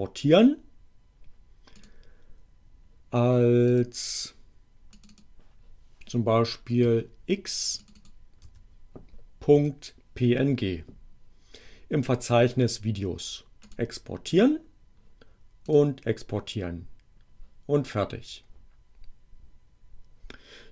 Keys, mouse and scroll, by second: 1.7 click, 3.7 click, 4.9 click, 6.8 x, 7.8 click, 8.3 x, 9.6 ., 13.7 click, 15.7 click.